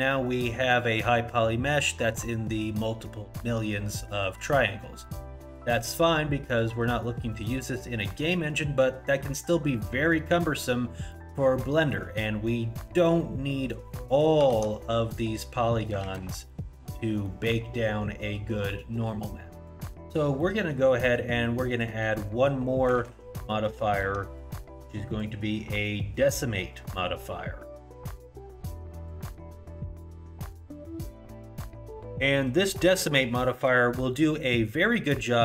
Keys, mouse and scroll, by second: 5.1 middle click, 6.5 scroll up 1, 6.6 middle click, 7.2 middle click, 8.0 middle click, 9.8-11.1 scroll down 1, 11.1-12.0 scroll down 1, 12.0 middle click, 12.0 scroll up 1, 14.1 middle click, 15.1 alt+z, 16.1 shift+z, 16.5 middle click, 17.3 middle click, 20.4 middle click, 21.0-21.7 scroll up 1, 21.7 click, 23.0 shift+z, 23.5 scroll down 1, 24.0 alt+z, 25.1 click.